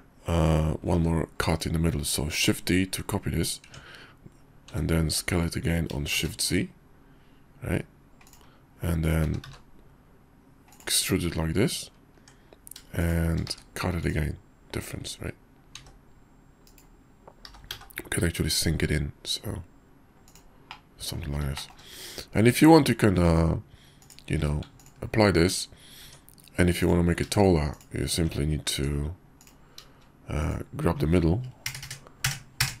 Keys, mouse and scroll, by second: 0.9 shift+d, 3.6 Tab, 4.7 s, 9.2 s, 12.2 Tab, 13.0 shift+click, 13.4 q, 14.3-20.5 middle drag, 15.9 s, 17.4 g, 20.7-21.2 drag, 21.6 shift+middle click, 22.5 Tab, 23.2 Tab, 24.0 click, 24.3 q, 26.0 Tab, 26.8 click, 27.7 click, 28.2 Tab, 30.4 click, 31.6 ctrl+KP_Add, 31.8 ctrl+KP_Add, 32.2 ctrl+KP_Add, 32.6 ctrl+KP_Add.